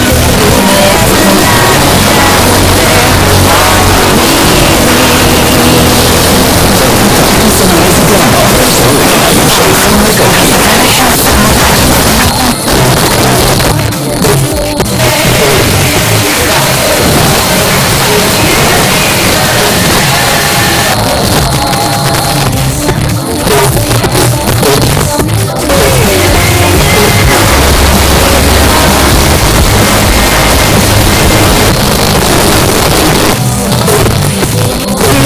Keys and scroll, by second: 12.2 Page_Down, 20.9 Page_Down, 31.7 Page_Down.